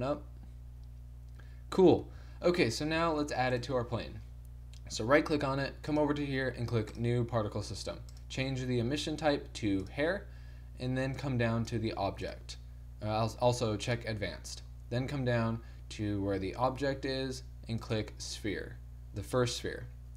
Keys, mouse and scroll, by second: 1.9 z, 3.0 z, 17.8-19.4 drag, 19.7 middle click.